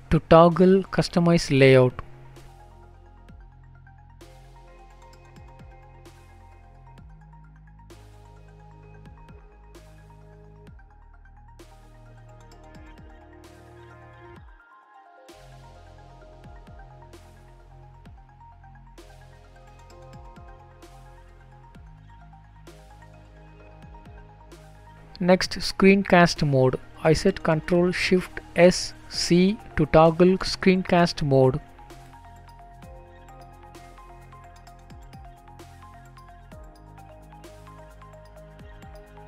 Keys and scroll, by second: 10.9 typing, 21.7 typing.